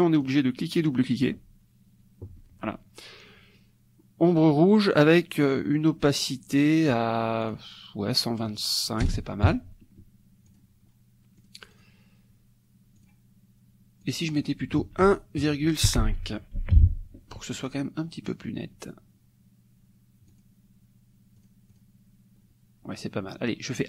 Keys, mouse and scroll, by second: 0.2 click, 0.8-2.7 drag, 7.4 click, 9.5 KP_5, 10.7 click, 11.4 click, 13.0 click, 14.2 click, 14.8 ctrl+a, 15.1 ctrl+KP_1, 16.8 KP_5, 20.3 click, 21.5 click.